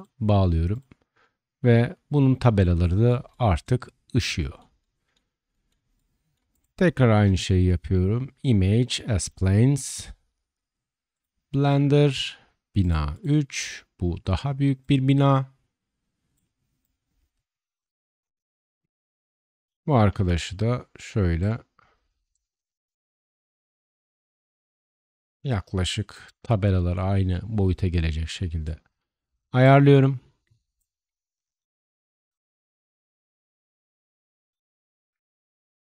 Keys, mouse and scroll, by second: 5.3-6.5 shift+middle drag, 6.5 click, 6.5-9.4 shift+middle drag, 7.0 shift+a, 13.2-14.7 middle drag, 14.7-21.4 drag, 20.1 s, 21.4-22.3 middle drag, 22.3-26.2 drag, 25.2 s, 26.2-27.2 middle drag, 27.2-35.8 drag.